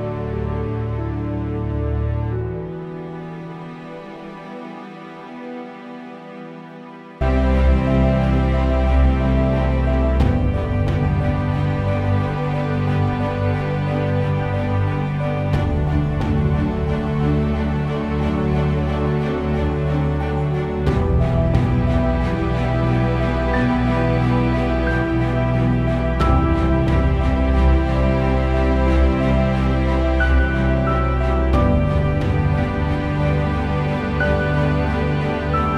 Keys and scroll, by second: 3.6 1, 4.6 6, 4.9 Return, 10.8 8, 11.0 Return, 22.5 3, 22.8 Return, 31.7 4, 32.1 Return.